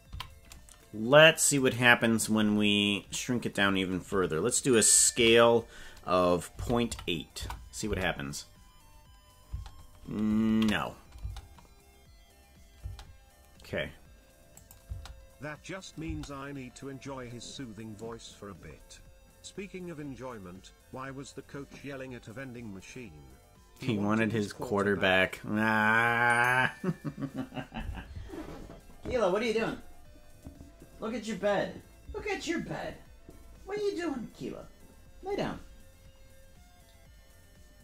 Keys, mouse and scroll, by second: 0.1 a, 1.6 click, 5.1 s, 7.8 space, 9.6 space, 10.5 ctrl+z, 11.2 space, 12.9 space, 14.6 click, 14.8 space, 16.1 space.